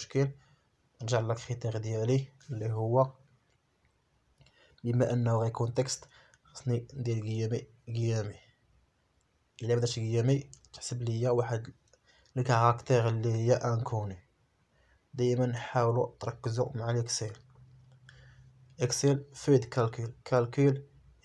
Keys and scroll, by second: 2.4 F4, 3.7 F4, 7.5 BackSpace, 9.2 F4, 12.0 F4, 15.1 ..